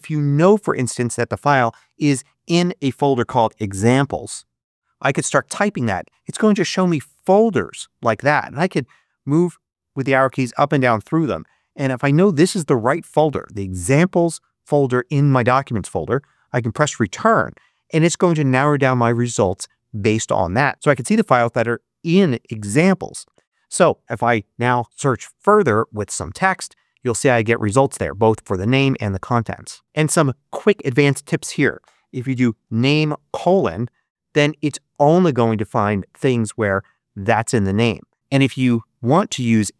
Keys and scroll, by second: 2.8-4.5 typing, 9.0 Down, 10.3 Up, 16.7 Return, 24.3-25.3 typing, 30.6 Left, 31.8-33.2 typing, 38.3 space.